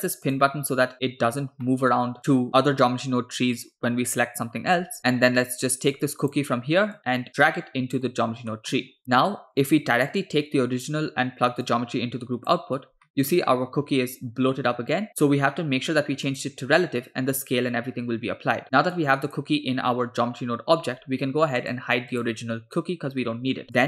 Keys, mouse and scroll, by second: 0.3 click, 1.7 middle click, 5.0 click, 6.0 click, 7.3 click, 8.5 middle click, 9.0 middle click, 9.0 click, 11.7-12.6 drag, 13.1 middle drag, 13.5-14.7 scroll up 4, 16.4 click, 19.0-19.5 drag, 21.7 click, 22.2 click, 23.6 middle click, 23.8 click.